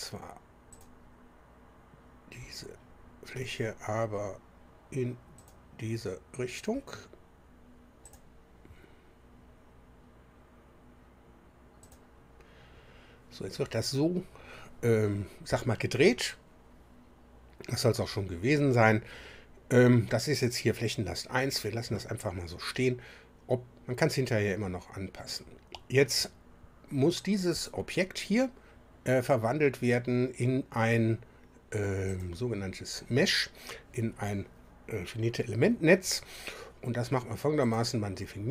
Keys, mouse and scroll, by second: 0.7 click, 5.4 click, 8.0 click, 11.8 click, 27.5 click, 32.1 click, 37.6 click.